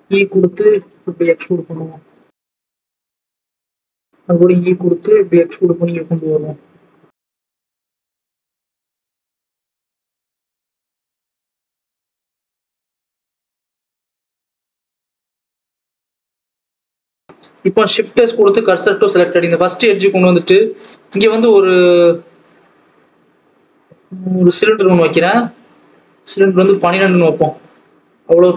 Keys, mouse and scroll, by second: 1.1 r, 2.3 s, 3.1 g, 4.0 e, 5.3 r, 6.2-6.6 scroll down 1, 6.6 click, 7.5 Left, 8.1 KP_3, 8.5 KP_1, 8.9 scroll down 1, 9.1 scroll up 1, 9.5 r, 10.6 click, 10.9 r, 12.3 click, 13.1 click, 14.5 click, 15.0 r, 16.0 s, 16.9 click, 17.2 scroll up 2, 17.5 click, 18.7 shift+s, 18.9 alt+a, 19.2 Tab, 19.6 alt+a, 20.3 scroll down 1, 20.6-24.4 scroll up 1.